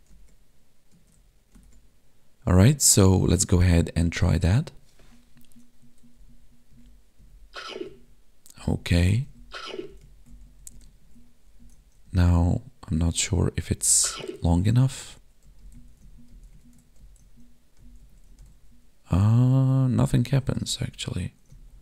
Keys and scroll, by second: 1.7 Tab, 3.4 Tab, 6.2 Up, 6.7 Left, 7.2 Down, 7.8 Right, 8.5 Up, 9.2 Left, 9.9 Down, 10.0 Right, 10.3 Up, 10.4 Left, 10.7 Down, 10.8 Right, 11.0 Down, 11.1 Right, 11.2 Left, 11.6 Up, 11.7 Right, 12.0 Down, 13.1 Right, 13.8 Down, 13.8 Left, 14.4 Up, 14.7 Right, 14.8 Up, 15.4 Left, 15.6 Down, 15.7 Right, 15.9 Left, 16.0 Up, 16.1 Left, 16.3 Down, 16.5 Left, 16.6 Right, 16.7 Left, 17.0 Up, 17.2 Right, 17.8 Down, 18.0 Left, 18.1 Up, 18.2 Right, 18.4 Down, 18.5 Left, 19.1 Up, 19.3 Right, 19.9 Down, 20.1 Left, 20.3 Up, 20.5 Right, 20.6 Down, 20.7 Left, 21.5 Right, 21.5 Up.